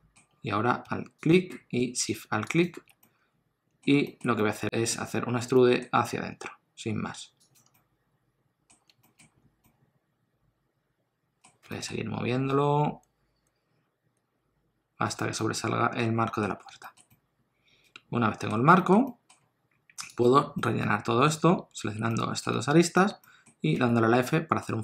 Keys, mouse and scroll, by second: 1.2 alt+click, 3.0 middle click, 4.0 shift+middle click, 4.4 middle click, 5.4 e, 7.7 middle click, 9.0 shift+middle click, 9.3-9.6 scroll up 2, 9.6 middle click, 11.6 g, 15.4 middle click, 16.5 scroll down 1, 16.7 shift+middle click, 17.1 middle click, 18.8 shift+middle click, 19.1 middle click, 20.5 middle click, 22.9 shift+click, 23.7 middle click, 23.7 f, 24.2 middle click.